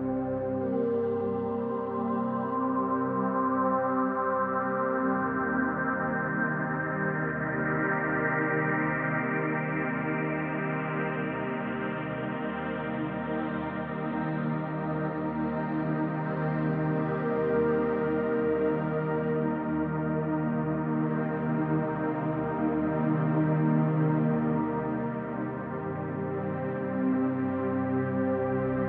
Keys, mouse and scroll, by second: 0.3-0.7 typing, 1.1 Return, 1.9-3.6 drag, 3.4-4.1 typing, 4.0-5.7 ctrl+drag, 6.9-15.5 drag, 16.0-18.5 typing, 16.8 Return, 18.0 click, 19.2 click, 20.0 click, 20.6 click, 21.3 click, 22.8 click, 24.1-26.6 drag, 25.6-26.4 typing, 27.3-28.8 drag.